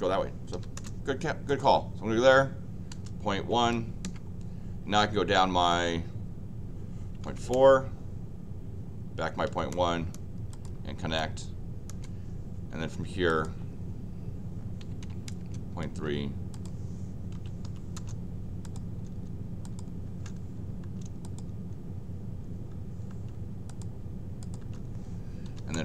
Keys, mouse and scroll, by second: 0.5 l, 0.7 Return, 1.5 click, 10.5 click, 13.3 click, 16.5 click, 17.3 c, 17.6 p, 17.9 Return, 18.6 click, 19.6 click, 20.0 Return, 20.8 Return, 21.2 click, 23.1 Return, 23.6 click, 24.4 click, 24.6 Return, 25.4 l, 25.7 Return.